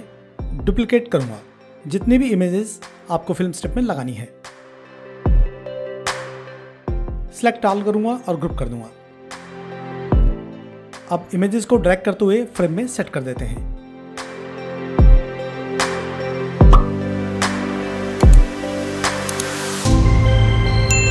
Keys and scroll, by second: 4.2 ctrl+d, 5.9 ctrl+d.